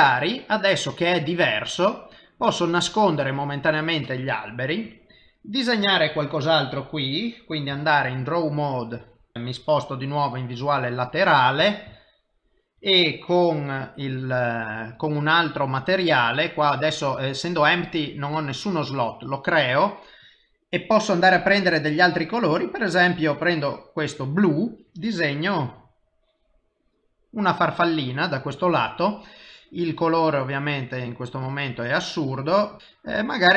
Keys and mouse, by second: 3.6 click, 4.7 middle click, 7.7 typing, 8.0 ctrl+Tab, 9.3 shift+middle click, 10.6 KP_3, 12.0 shift+middle click, 14.8 click, 18.8 click, 20.2 click, 25.0 click, 26.1 click, 29.9 click, 33.2 click.